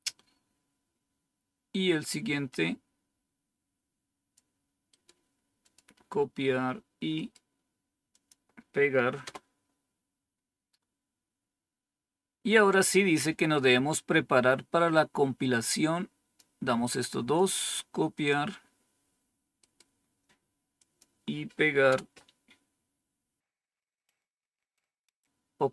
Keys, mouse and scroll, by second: 0.8 scroll down 1, 2.4-4.3 drag, 5.6 click, 8.1 click, 9.2 Return, 11.2-12.1 scroll down 1, 12.1-13.7 scroll down 1, 14.8-16.3 drag, 18.1 click, 20.7 click, 21.8 Return, 24.1-25.0 scroll down 1, 25.0-25.7 scroll up 1.